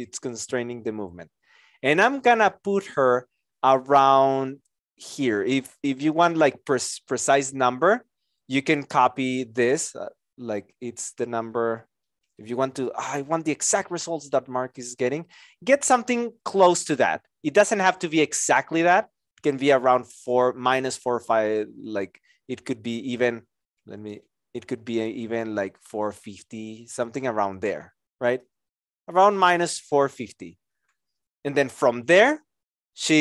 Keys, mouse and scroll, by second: 22.5 ctrl+click, 23.6 ctrl+z, 24.2 shift+click.